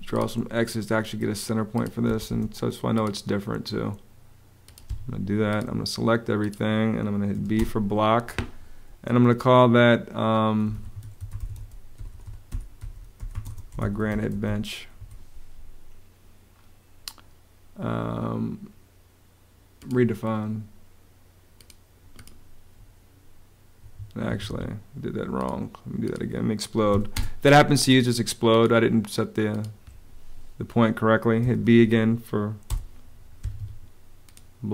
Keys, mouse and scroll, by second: 1.8 space, 4.6 Escape, 7.0 b, 7.3 space, 10.2-14.7 typing, 14.7 Return, 23.5 Escape, 26.6 x, 26.9 space, 31.1 b, 32.4 Return, 33.1 Escape.